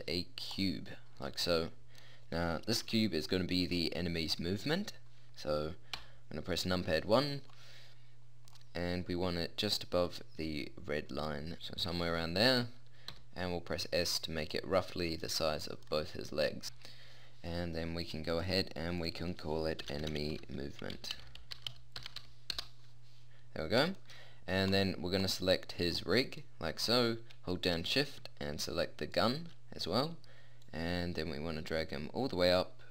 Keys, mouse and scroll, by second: 6.0 KP_1, 9.6-11.2 drag, 11.7 middle click, 13.1 s, 16.6 KP_1, 25.9-29.1 middle drag, 30.6-32.4 drag.